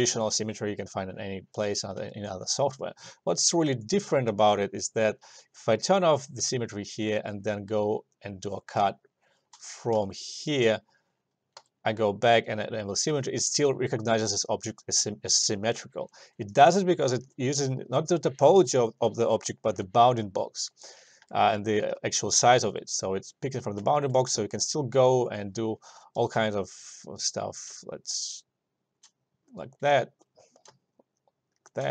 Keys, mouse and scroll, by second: 2.5 alt+click, 3.7 alt+middle click, 4.4 s, 6.0 click, 6.6 alt+middle click, 7.1 e, 8.2 click, 8.9 space, 11.7 s, 12.7 click, 13.3 alt+middle click, 16.5 alt+middle click, 17.2 alt+shift+click, 21.3 alt+click, 21.4 alt+middle click, 21.7 alt+click, 22.7 s, 23.4 click, 24.0 alt+middle click, 26.3 e, 26.9 click, 29.1 space, 30.4 click, 30.8 space.